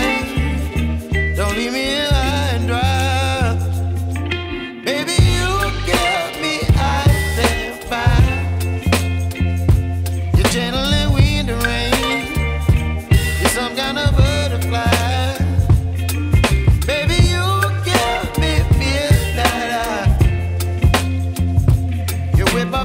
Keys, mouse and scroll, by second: 3.6 shift+a, 14.8 shift+d, 20.2-21.2 scroll down 3, 21.2-22.8 scroll down 1.